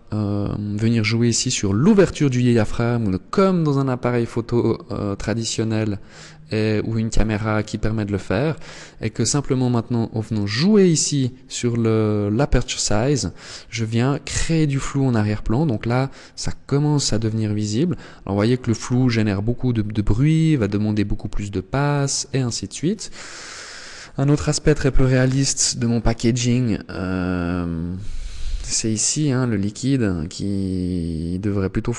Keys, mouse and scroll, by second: 5.9 click, 8.4 click.